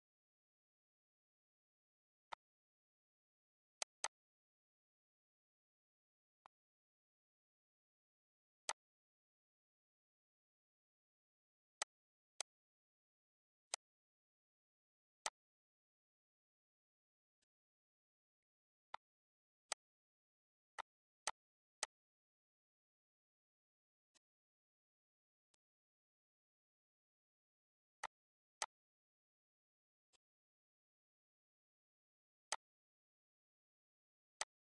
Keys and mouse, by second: 1.2 click, 2.9 click, 3.7 click, 5.6 click, 7.4 click, 7.8 click, 8.5 click, 9.4 click, 11.0 click, 11.5 click, 12.2 click, 12.9 click, 13.2 click, 13.7 click, 14.5 click, 15.1 click, 16.0 click, 16.4 click, 17.8 click, 18.3 click, 18.9 click, 20.0 click, 20.5 click, 20.9 click, 21.6 click, 23.2 click, 24.5 click, 25.6 click, 26.3 click, 27.1 click, 27.7 click, 28.6 click, 28.9 click, 29.8 click, 31.5 click, 31.9 click, 33.2 click.